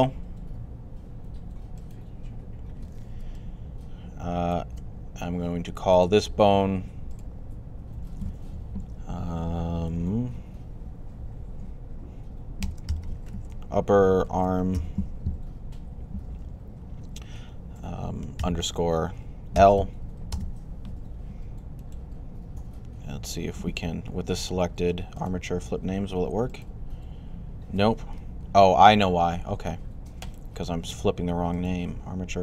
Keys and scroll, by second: 12.2-15.1 typing, 18.2 typing, 19.4 typing, 28.3 super+z.